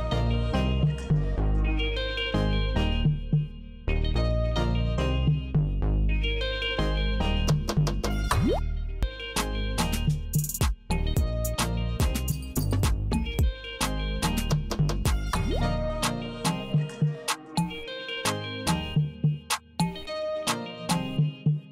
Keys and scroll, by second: 3.7 Return, 13.1 super+r, 17.7 Return, 20.7 super+r.